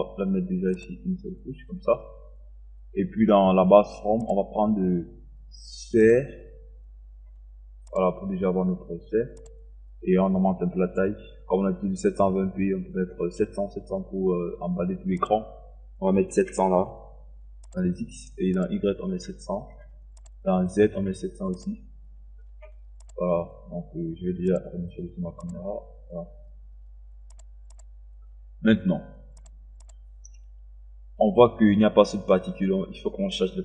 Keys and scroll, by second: 16.2 KP_7, 16.6 0, 19.1 KP_7, 19.6 KP_0, 20.9 KP_7, 21.6 KP_0.